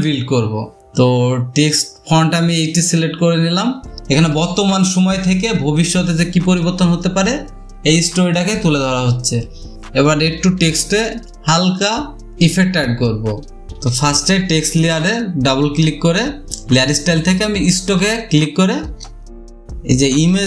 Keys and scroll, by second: 4.0 ctrl+t, 7.4 ctrl+h, 15.1 space.